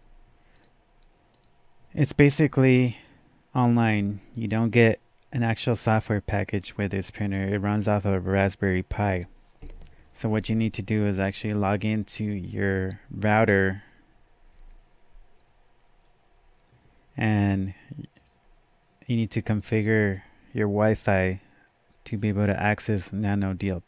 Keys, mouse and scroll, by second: 0.6 click, 0.6 scroll up 1, 1.3 click, 18.1 click.